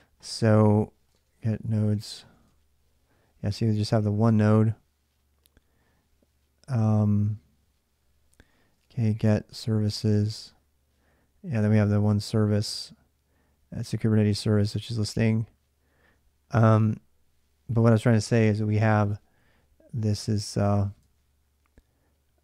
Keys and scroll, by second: 0.6-2.7 typing, 8.3-10.5 typing, 18.8 alt+Tab, 20.8 alt+Tab.